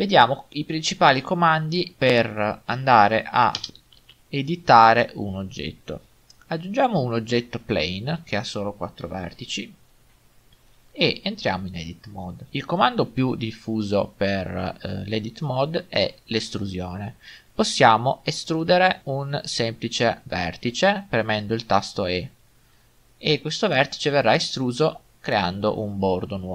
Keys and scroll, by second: 3.6 0, 3.7 Return, 11.5 Tab, 20.7 e.